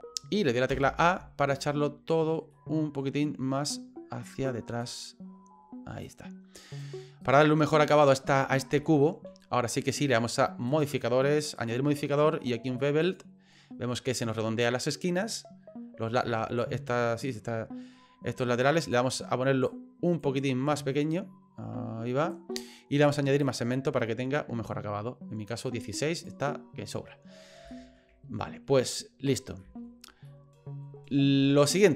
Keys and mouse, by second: 0.7 a, 2.5 middle click, 4.8-6.0 drag, 6.6 right click, 7.2 right click, 7.8 middle click, 8.8 shift+middle click, 11.7-13.1 drag, 18.9-20.4 drag, 20.8-22.3 drag, 23.6-24.6 drag, 25.5 right click, 26.2 right click, 26.4 middle click, 27.7 shift+middle click, 29.6 shift+middle click, 30.3 middle click.